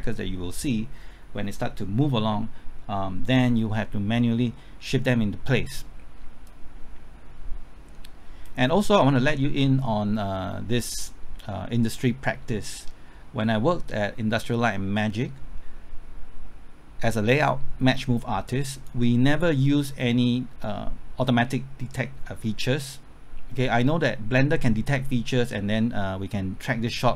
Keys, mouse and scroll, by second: 6.5-27.1 drag.